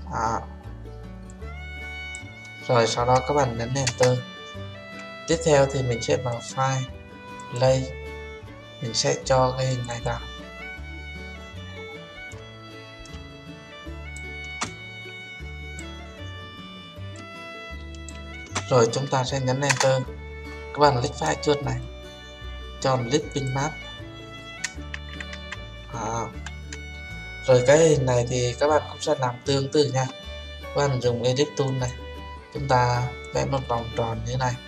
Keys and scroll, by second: 3.8 Return, 19.7 Return.